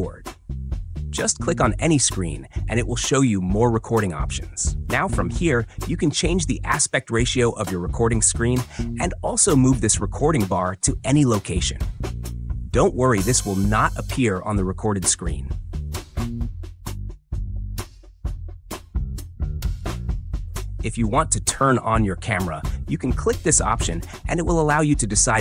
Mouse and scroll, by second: 15.6 click, 15.8-19.2 drag, 19.4-25.4 drag.